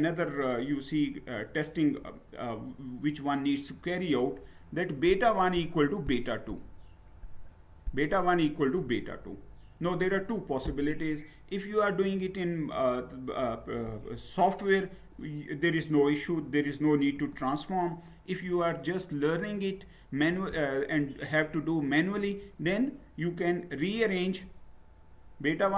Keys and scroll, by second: 22.4 Down, 23.7 Down.